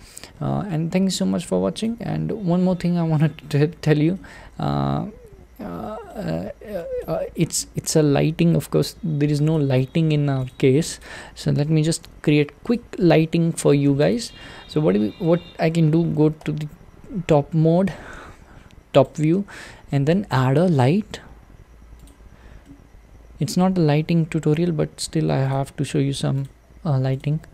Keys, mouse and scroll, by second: 3.6-4.2 scroll down 3, 4.2-7.0 middle drag, 7.0 click, 7.6-9.5 middle drag, 9.5 click, 10.5 click, 11.0 click, 11.7 g, 13.5-14.1 shift+middle drag, 14.1 click, 14.4-15.4 middle drag, 15.4-16.4 scroll down 2, 16.4 `, 18.9 shift+right click, 22.1 shift+a, 22.6-24.3 middle drag, 24.3 g, 26.4 click, 27.2 click.